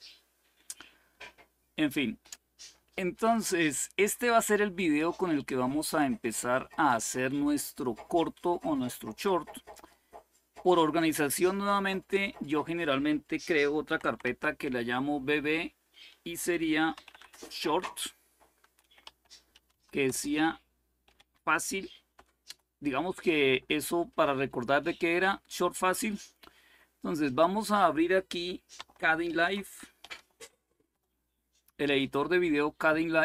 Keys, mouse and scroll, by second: 0.0-2.0 scroll down 1, 2.0-4.5 scroll down 1, 4.5 click, 5.5-6.5 drag, 8.3 click, 9.0 click, 11.4-13.6 drag, 13.4-14.5 typing, 16.7-21.1 typing, 22.2 Return, 23.4 click, 27.0-28.2 drag, 29.0 alt+super+d, 29.8-30.6 typing, 30.6 Return.